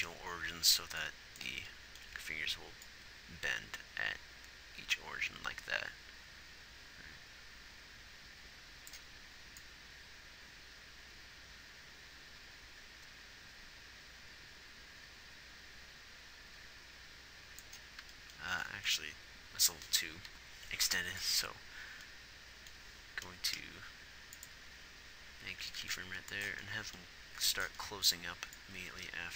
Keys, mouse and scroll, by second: 2.5 z, 19.5 z, 21.7 i, 23.9 r, 27.6 a, 27.6 b.